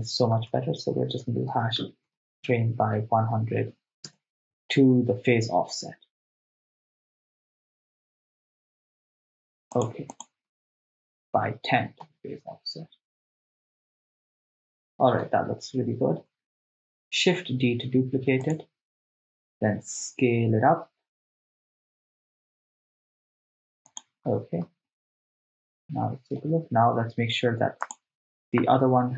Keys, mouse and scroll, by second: 3.7 0, 5.8 shift+space, 7.3 shift+space, 7.9 shift+space, 8.4 shift+space, 9.8-11.4 drag, 12.1 shift+space, 15.3 shift+space, 17.5 shift+d, 18.5 right click, 19.5 s, 24.0 click, 25.6 shift+space, 26.5 shift+space, 27.9-29.1 drag.